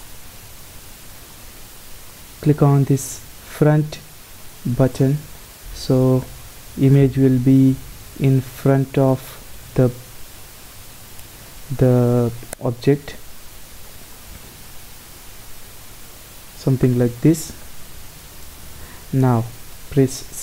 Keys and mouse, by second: 0.0-3.5 drag, 3.5-4.8 middle drag, 4.8-6.6 drag, 6.6-8.3 middle drag, 8.3 n, 9.5 b, 14.9 KP_0, 18.6 KP_0, 20.1 shift+a.